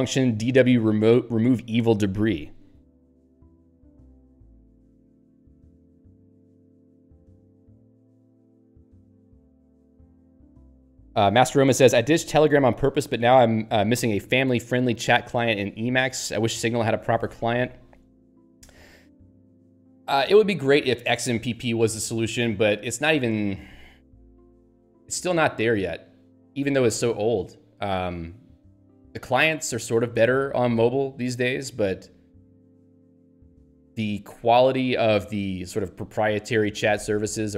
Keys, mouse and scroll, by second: 6.7 alt+v, 12.6 alt+v.